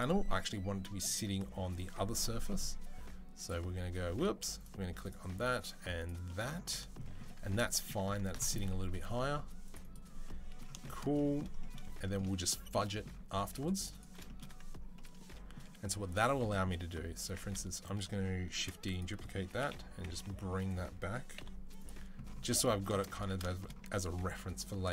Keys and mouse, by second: 3.2 click, 3.3-4.8 middle drag, 4.8 click, 5.0-8.1 middle drag, 8.5 ctrl+r, 8.6-10.5 middle drag, 10.8 middle click, 11.5-12.9 middle drag, 13.2 ctrl+r, 13.4 middle click, 14.2-16.1 middle drag, 17.0 Tab, 18.3 shift+d, 19.3 g, 22.2-24.9 middle drag, 22.9 Tab, 23.6 Tab.